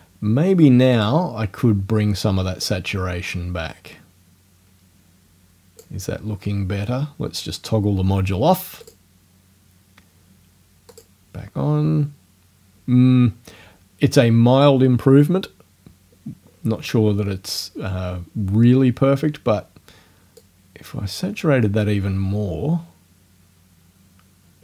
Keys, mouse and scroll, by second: 1.0 click, 2.7-6.0 drag, 8.8 click, 10.9 click, 20.4-24.6 drag.